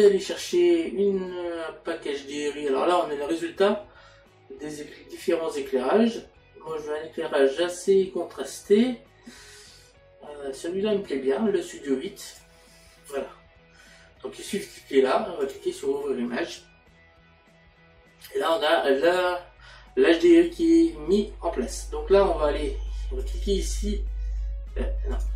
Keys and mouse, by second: 12.3 click, 23.2 click, 25.1 click.